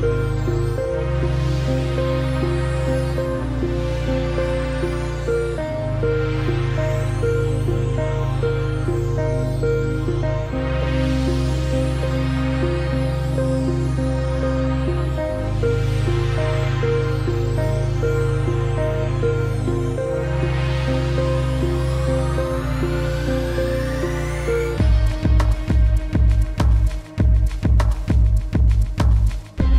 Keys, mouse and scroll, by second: 1.8 click, 2.6 ctrl+z, 3.2 click, 7.6 click, 8.6 z, 9.0 click, 9.7 shift+click, 14.0 click, 17.8 alt+scroll down 2, 18.1 ctrl+z, 18.7 click, 19.1-19.5 alt+scroll up 2, 19.6 click, 24.8 click, 25.6-26.5 typing, 26.6 Down, 26.8 Return.